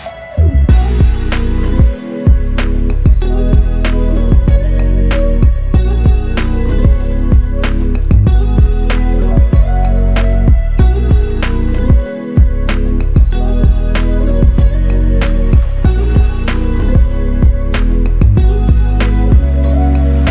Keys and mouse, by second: 1.7 double click, 4.8 alt+click, 9.3 double click, 11.2 shift+click, 12.5 shift+click, 15.5-16.8 typing, 18.2 double click.